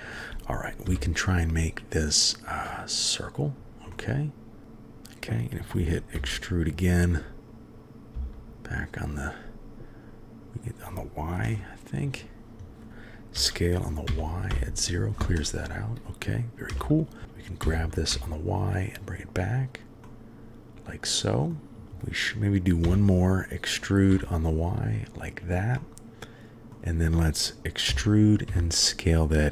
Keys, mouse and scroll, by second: 0.9 n, 2.7 click, 3.9-4.6 middle drag, 6.2 e, 11.4 KP_3, 12.9 s, 13.4 s, 17.2 g, 17.6 g, 20.0-21.5 middle drag, 22.8 e, 25.8-26.7 drag, 27.9 e.